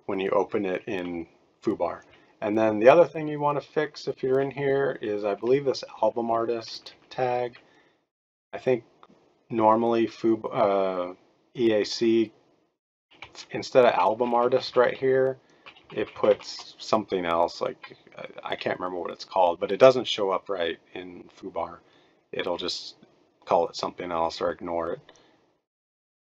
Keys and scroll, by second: 2.0-4.3 Right, 5.4 Right, 5.7 Right, 6.0 Right, 6.1 Right, 6.3 Right, 6.5 Right, 6.7 Right, 6.8 Right, 7.1 Right, 7.4 Right, 13.3-13.9 Left, 14.1 Left, 14.3 Left, 14.4 Left, 14.6 Left, 15.8 shift+Left, 15.9 shift+Left, 16.1 shift+Left, 16.3 shift+Left.